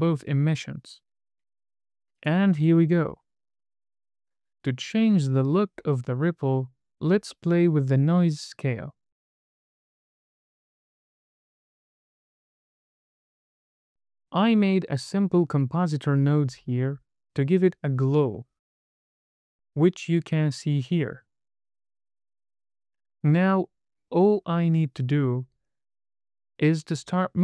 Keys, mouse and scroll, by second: 1.4 super+c, 1.5 scroll down 3, 1.6 middle click, 2.2 super+v, 2.6 scroll down 1, 2.7 middle click, 3.8-4.2 scroll down 2, 4.2 middle click, 7.7 middle click, 8.8-9.8 scroll up 3, 9.9 middle click, 10.3-11.4 scroll up 3, 11.4-13.0 drag, 15.2-17.4 drag, 18.1-18.7 scroll down 2, 18.7 middle click, 18.7 scroll down 1, 20.2-23.1 drag, 23.6-24.0 scroll up 1.